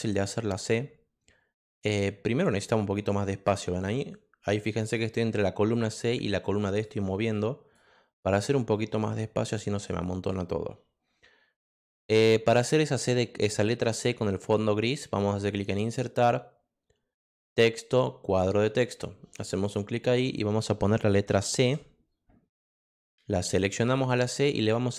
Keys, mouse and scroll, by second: 2.0 click, 3.0 click, 3.9 click, 4.9 click, 5.7 click, 6.4 click, 7.1 click, 8.7 click, 15.5 click, 17.5 click, 18.2 click, 19.6 click, 21.6 c, 22.8 click.